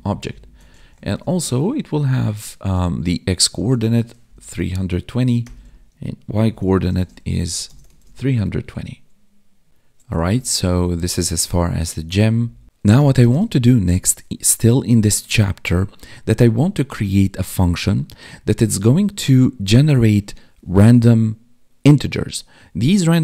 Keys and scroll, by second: 1.2 space, 6.9 space, 7.9 ctrl+s, 10.3 ctrl+Up, 12.4 Down, 14.5 Up.